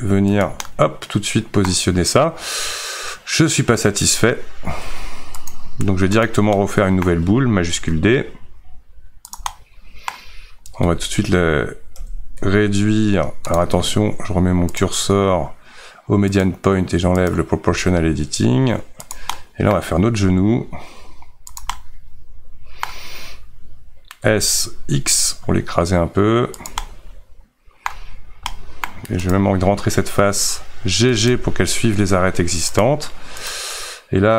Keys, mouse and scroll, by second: 0.6-5.5 middle drag, 5.5 x, 6.2 click, 6.6-7.9 middle drag, 7.9 shift+d, 9.5-10.8 middle drag, 10.8 Tab, 16.4-17.7 drag, 17.7 s, 19.3 middle click, 20.2 g, 21.8-24.2 middle drag, 24.2 s, 26.8-28.1 middle drag, 28.1-28.5 scroll up 2, 28.5 middle click, 29.3 click, 31.1 g, 33.5 click.